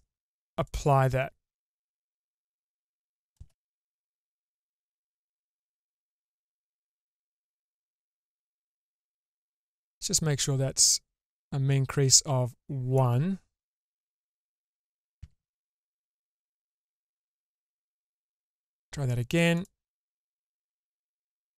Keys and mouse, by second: 0.5-1.7 drag, 2.6 click, 3.4 shift+space, 4.2 click, 4.4-6.8 middle drag, 7.0 ctrl+z, 7.5 ctrl+z, 8.2 ctrl+z, 8.7 Tab, 12.0 click, 15.2 Tab, 17.8-18.8 drag, 19.7-21.4 drag.